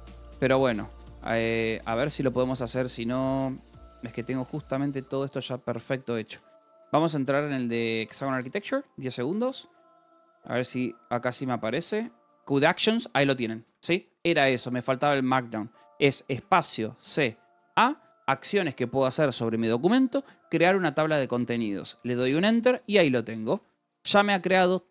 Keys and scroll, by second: 0.0-3.1 typing, 2.5 Return, 4.2-6.6 typing, 6.7 Return, 8.0-9.9 typing, 8.4 Return, 11.7 a, 13.5 Escape, 16.4 space, 17.0 c, 17.5 a, 22.0 Return, 22.6 Escape, 22.9-24.9 typing.